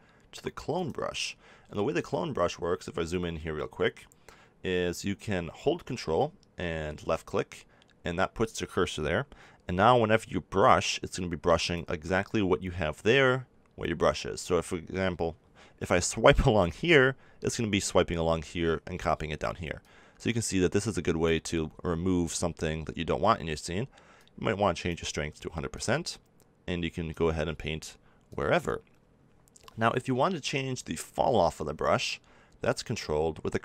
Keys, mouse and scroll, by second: 1.7-7.1 middle drag, 7.1-8.9 drag, 11.6-13.4 drag, 19.8-21.5 drag, 21.7 ctrl+z, 24.1-27.5 drag, 28.2-30.1 drag.